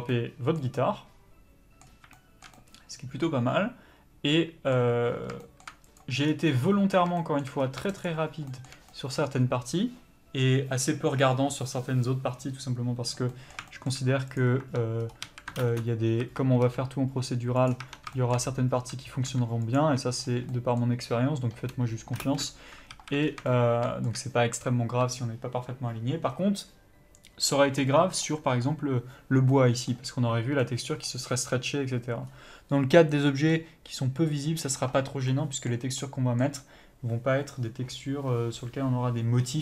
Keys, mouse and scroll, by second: 1.9 scroll up 1, 6.2 scroll down 2, 6.5-7.9 middle drag, 7.6 scroll up 1, 7.9-8.5 shift+right drag, 8.5-14.3 shift+middle drag, 14.3 click, 14.6 Tab, 15.0 scroll up 1, 15.2 a, 15.6 ctrl+space, 16.2 a, 16.6 s, 17.8 Tab, 18.1 shift+middle click, 18.4 scroll up 1, 18.7 Tab, 19.2 s, 19.8 Tab, 20.2 scroll down 1, 20.5 middle click, 22.2 ctrl+space, 22.2-39.6 middle drag, 22.9 alt+a, 23.2 scroll down 1, 32.2 scroll up 1.